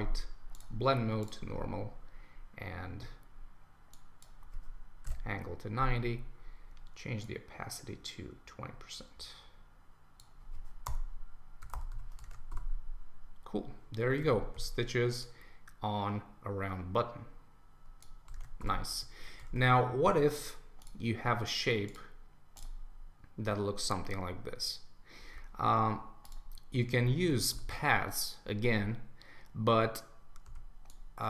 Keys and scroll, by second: 10.9 Return, 12.3 super+1, 14.2 super+s, 18.3 super+1, 19.5 super+s, 27.2 super+s.